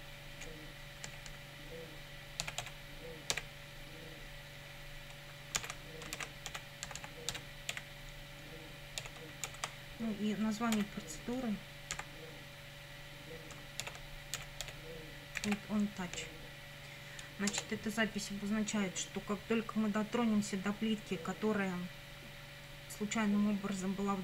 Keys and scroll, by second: 1.1 BackSpace, 2.2-3.3 typing, 5.6-9.5 typing, 10.8 o, 12.0 n, 13.8-16.0 typing, 16.2 Right, 17.5 Return.